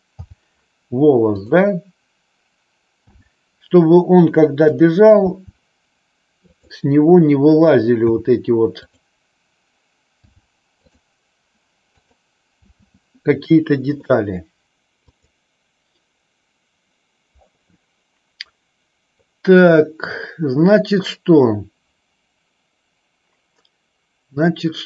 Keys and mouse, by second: 1.4 click, 1.4 h, 3.3 h, 5.4 h, 6.7 click, 8.1 h, 8.9 click, 10.3 h, 12.7 h, 14.1-14.6 middle drag, 15.1 click.